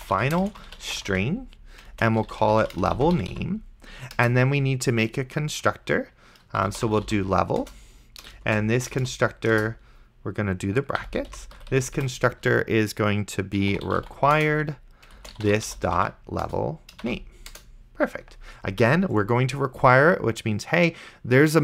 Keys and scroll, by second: 0.0-4.0 typing, 4.2 Return, 6.5-7.6 typing, 7.6 Return, 8.8-9.8 typing, 11.0 End, 11.3 ;, 11.6 BackSpace, 13.4-17.3 typing, 17.5 Return.